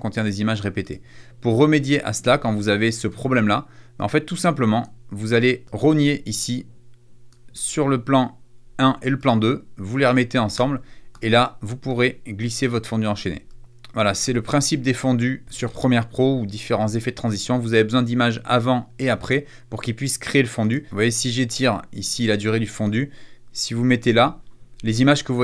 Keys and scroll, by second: 3.2 BackSpace, 20.7 =.